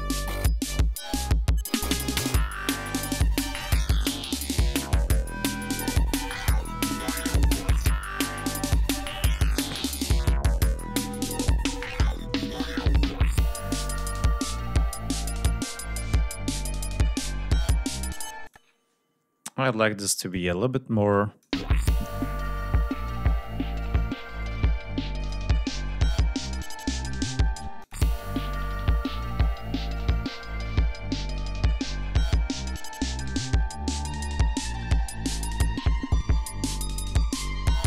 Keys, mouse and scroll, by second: 0.0 ctrl+scroll down 2, 0.4 ctrl+scroll up 2, 2.8 ctrl+scroll down 2, 5.0-5.5 scroll up 2, 6.2 ctrl+scroll down 2, 7.2 ctrl+scroll down 3, 7.8 scroll down 2, 8.7 ctrl+scroll up 2, 9.4 ctrl+scroll up 2, 12.6 ctrl+scroll down 2, 13.0 ctrl+scroll up 2, 14.4 ctrl+scroll down 2, 15.0 ctrl+scroll up 2, 15.7 ctrl+scroll up 3, 17.7 scroll up 2, 18.2 space, 18.4 click, 20.1-21.4 drag, 21.4 space, 24.3 click, 26.3 click, 27.5 space, 27.7 click, 34.1 ctrl+scroll down 2, 34.3 ctrl+scroll up 2.